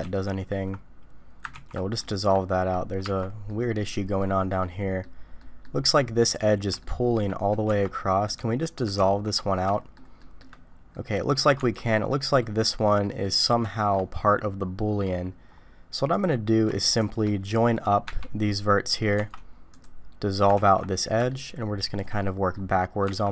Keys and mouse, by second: 0.1 ctrl+z, 1.6 ctrl+x, 2.0 shift+click, 2.5 click, 3.0 Tab, 3.5 click, 4.6 click, 5.4 click, 6.8 shift+click, 7.7 Tab, 9.0 ctrl+x, 9.7 shift+click, 10.2 shift+click, 10.9 click, 11.0 middle click, 11.6 Tab, 12.1-13.2 drag, 13.6 shift+middle click, 14.2 middle click, 16.1 middle click, 18.1 j, 19.2 Tab, 19.8 click, 20.6 ctrl+x, 21.3 shift+click, 22.2 click, 23.1 Tab.